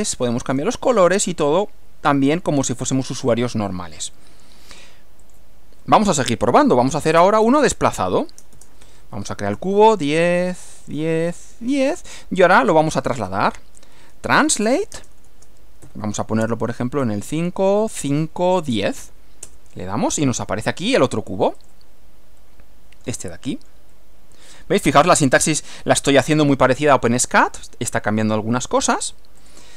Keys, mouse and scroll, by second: 1.6 click, 2.7 click, 3.5-4.9 middle drag, 5.3 click, 6.9-19.1 typing, 15.9 shift+Left, 19.5 Return, 21.6 click, 22.4-25.2 middle drag, 29.4 click, 29.7 right click.